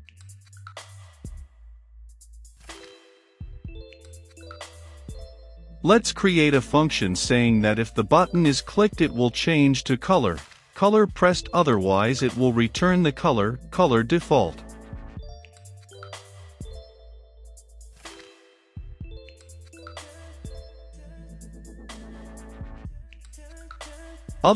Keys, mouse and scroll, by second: 0.2 i, 0.4 f, 0.9 shift+9, 3.3-4.9 drag, 4.9-5.7 typing, 6.6 Return, 7.1 >, 8.2 d, 8.4 w, 9.0 Return, 9.4 Right, 10.5 shift+], 10.7 Return, 13.4-17.6 typing, 14.3 Return, 15.5 Return, 18.3 Down, 20.3 Return, 20.7-22.3 typing, 22.1 Return, 22.5 Return, 23.2 Down, 23.7 space, 24.0 e, 24.3 l, 24.4 e.